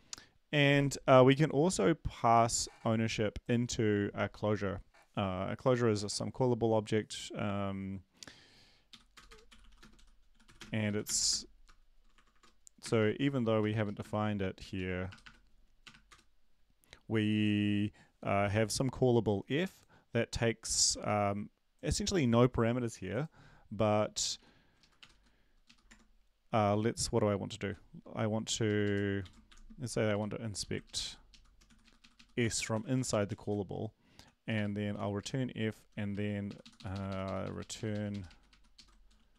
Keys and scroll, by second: 8.9 Down, 8.9 End, 9.1 Return, 9.3-16.0 typing, 13.8 Left, 16.1 Return, 23.9 Down, 24.3 ctrl+Right, 24.8 Left, 25.0 BackSpace, 25.1 Right, 25.6 Up, 25.9 Tab, 28.5 Down, 29.2 Down, 29.2 End, 29.5 shift+Home, 29.8 Left, 30.1 End, 30.6 Left, 31.6 ctrl+shift+Left, 32.1 ctrl+x, 32.7 Up, 32.9 Up, 33.1 Up, 33.3 Home, 34.2 shift+Home, 34.5 BackSpace, 34.9 f, 35.2 Right, 35.5 Down, 35.9 Down, 36.1 Right, 36.5 Up, 36.6 Up, 36.7 Up, 38.2 Right, 38.2 Up, 38.7 ctrl+Left, 39.1 e.